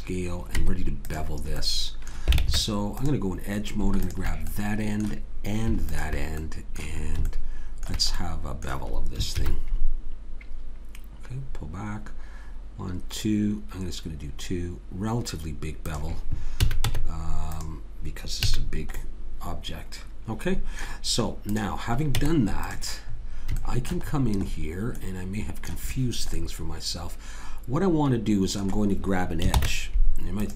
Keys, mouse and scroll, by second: 0.6 Tab, 2.4 ctrl+Tab, 4.5 click, 9.4 ctrl+b, 16.6 a, 16.8 Tab, 18.5 a, 18.6-20.4 middle drag, 21.5 click, 22.2 Tab, 25.7-28.1 middle drag, 29.5 ctrl+Tab.